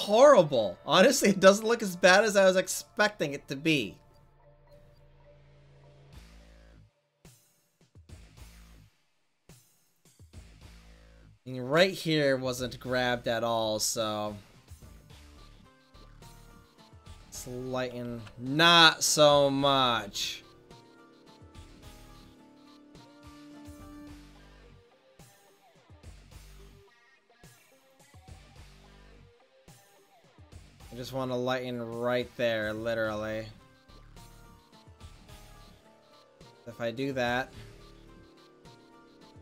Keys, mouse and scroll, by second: 4.7-5.7 middle drag, 7.1 right click, 8.2 middle click, 16.1 f, 16.6-18.3 drag, 18.3 ctrl+z, 19.8-21.5 drag, 21.9-24.5 drag, 22.6 right drag, 24.5-27.5 middle drag, 27.5 ctrl+z, 28.3 ctrl+z, 29.4 middle click, 30.3 f, 30.9 click, 31.8-33.6 drag, 37.2-39.4 right drag.